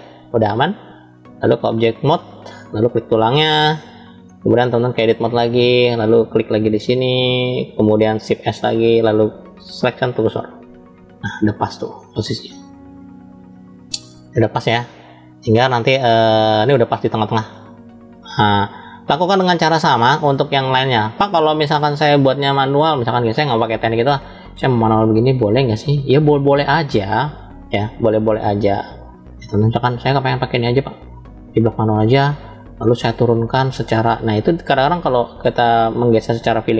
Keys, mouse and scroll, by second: 0.8 click, 1.2-2.0 drag, 2.6 click, 3.3-3.8 middle drag, 3.8 click, 4.8-5.5 drag, 6.4 click, 8.3 shift+s, 11.0-19.9 middle drag, 21.0 middle click, 22.3-23.4 middle drag, 24.3 middle click, 25.5 click, 26.7 click, 28.3 ctrl+z, 29.3 click, 30.8 click, 31.8 middle click, 33.6-35.3 middle drag, 36.0-36.7 drag.